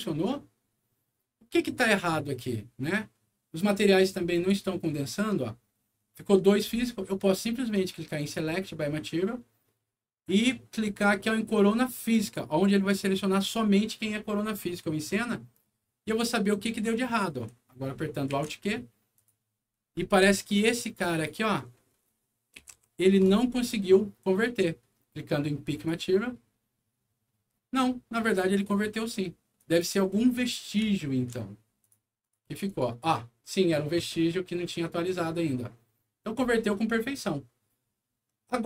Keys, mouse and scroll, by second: 4.2 click, 8.1 click, 12.0 click, 16.7 middle click, 18.2 alt+q, 19.1 alt+click, 19.5-20.3 alt+scroll up 3, 21.0 alt+click, 21.7 middle click, 22.5 p, 22.8 z, 23.7 alt+middle click, 25.7 alt+click, 29.5 click, 30.9 alt+middle click, 31.7 alt+click, 32.1 alt+click, 32.3 alt+click, 32.6 alt+click.